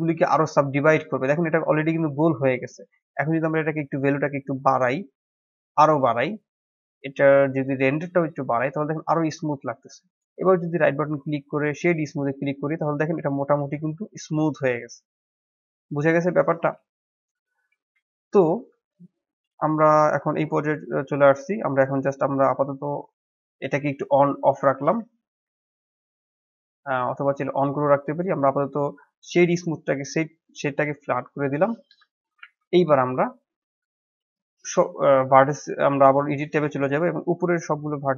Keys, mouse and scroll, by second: 0.8-3.9 middle drag, 4.4-8.6 drag, 8.6-9.9 middle drag, 9.9-12.3 right drag, 12.3-15.3 middle drag, 16.8-17.8 shift+middle drag, 17.8 KP_1, 18.4 scroll down 4, 18.7-19.1 shift+middle drag, 19.1-19.4 scroll up 4, 20.1-21.5 scroll up 1, 21.5 click, 24.7 scroll down 1, 25.0-27.2 shift+middle drag, 27.2-28.0 drag, 28.0-31.2 right drag, 31.2 middle click, 31.8 KP_1, 32.3 shift+z, 32.6 scroll up 3, 32.9-34.0 shift+middle drag, 34.0 Tab, 36.6 click, 37.2-38.1 drag.